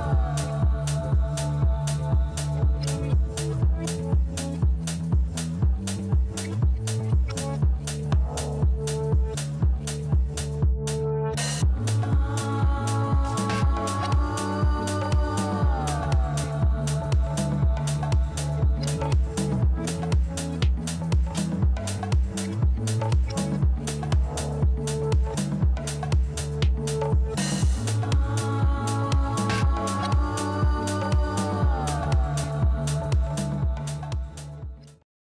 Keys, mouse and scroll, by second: 0.4 click, 7.4 click, 8.9 click, 14.7 click, 16.8-17.9 scroll, 18.7 click, 19.3 click, 19.5-19.9 scroll, 20.3 click, 20.5 scroll, 21.8 right click, 23.0 click, 23.0 scroll, 26.0 click, 28.3 click, 28.8-29.2 scroll, 29.6 scroll down 7, 29.9 scroll up 5, 31.5 click, 31.9 click, 32.5 scroll, 34.9 click.